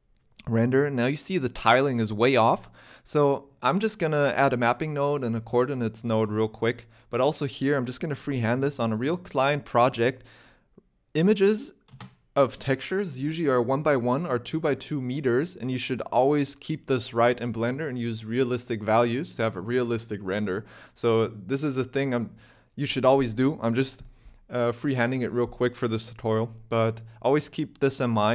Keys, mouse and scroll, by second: 0.2 KP_0, 3.0 scroll down 4, 3.0 KP_0, 3.1 middle click, 3.3 shift+a, 4.2 p, 5.1-5.8 scroll up 1, 5.8 click, 5.8 scroll up 3, 6.0 middle click, 6.1 shift+a, 6.8 o, 10.2 click, 11.2 click, 11.9 scroll up 6, 12.2 shift+middle click, 12.5 z.